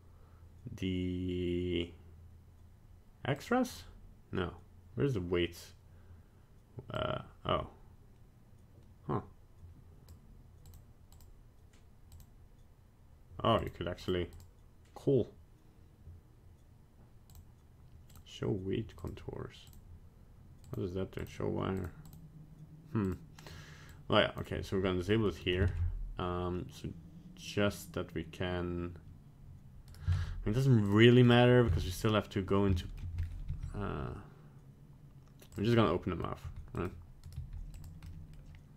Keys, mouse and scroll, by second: 22.1 click, 25.1 middle click, 25.7 ctrl+Tab, 30.1 ctrl+Tab, 31.2 right click, 31.8 ctrl+Tab, 32.8 shift+middle click, 33.2 scroll up 1, 33.5 g, 35.8 middle click, 36.4 g, 37.3 right click, 37.3 g, 38.1 middle click.